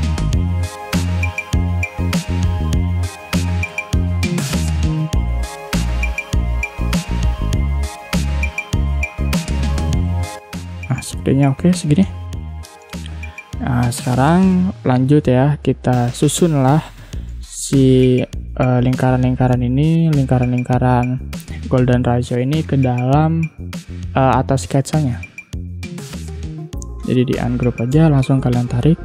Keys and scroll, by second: 0.6 space, 3.7 space, 8.1 ctrl+z, 12.7 ctrl+0, 17.2 space, 19.8 space, 21.8 2, 22.3 Return, 27.4 ctrl+shift+g, 27.9 space.